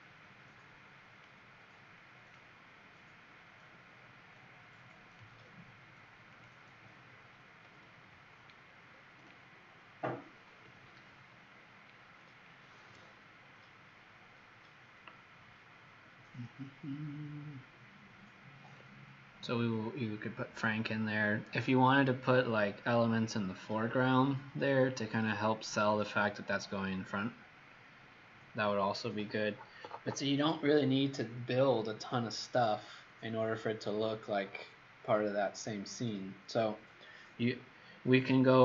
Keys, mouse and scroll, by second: 8.6-10.0 alt+scroll down 2, 10.0 alt+scroll up 1, 38.5-38.6 scroll down 2.